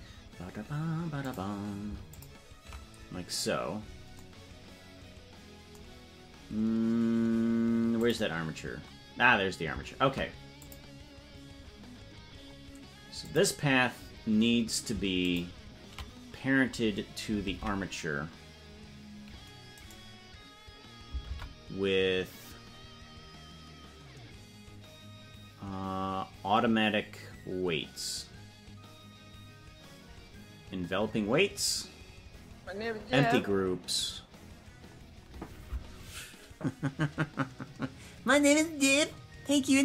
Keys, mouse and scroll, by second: 1.2 click, 2.1 ctrl+click, 6.3 scroll down 2, 7.1 scroll down 3, 7.9 click, 7.9 scroll up 2, 10.6 click, 12.3-12.8 scroll down 4, 13.2 click, 15.2 ctrl+click, 17.4 ctrl+Tab, 19.8 right click, 21.2 ctrl+p.